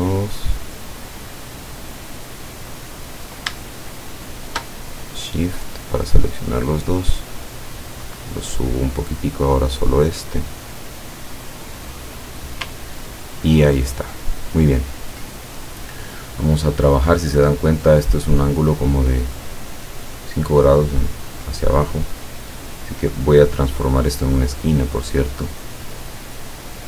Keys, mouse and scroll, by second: 2.5 click, 3.9 shift+click, 5.4-9.1 drag, 9.5 click, 10.4-12.7 drag, 12.9-13.4 ctrl+scroll down 2, 14.1 ctrl+scroll up 1, 14.6 ctrl+scroll up 1, 20.9-23.2 drag, 24.0 click, 26.4-26.8 drag.